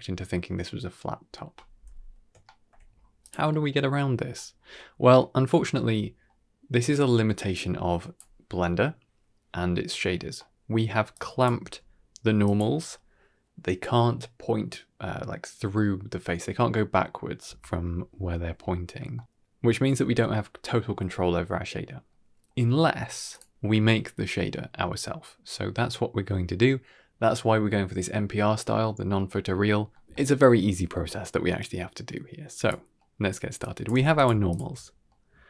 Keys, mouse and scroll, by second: 0.0 click, 1.6-2.2 scroll down 1, 2.2 scroll down 3, 2.3 shift+middle drag, 2.8-3.2 scroll up 3, 3.1 click, 3.4 shift+middle drag, 3.7 middle click, 4.4-4.8 scroll down 3, 4.6 middle click, 5.1 middle click, 7.4-8.0 drag, 10.3-10.7 middle drag, 11.0-11.4 drag, 11.5 g, 15.7-16.0 middle drag, 16.2 shift+middle drag, 16.8-18.6 scroll down 1, 18.6-18.9 middle drag, 20.3 middle click, 20.9 middle click, 21.6 click, 22.0 x, 29.3-29.8 middle drag, 30.0 middle click, 31.5-32.6 drag, 32.9 middle click, 33.5 click, 33.8 g, 34.4 ctrl+shift+click, 35.0-35.4 middle drag.